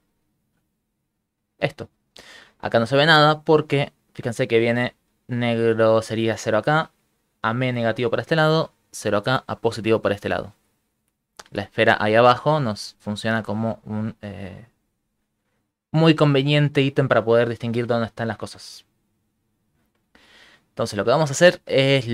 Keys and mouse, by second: 1.1 middle click, 2.0 shift+middle click, 10.6 middle click, 11.4 shift+middle click, 12.5 ctrl+middle click, 12.9 shift+middle click, 13.4 right click, 13.8 g, 18.1 shift+middle click, 18.6 ctrl+middle click, 19.0 middle click, 19.6 middle click, 19.8 shift+middle click, 20.3 ctrl+middle click, 20.6 shift+middle click, 21.0 ctrl+middle click, 21.8 shift+middle click.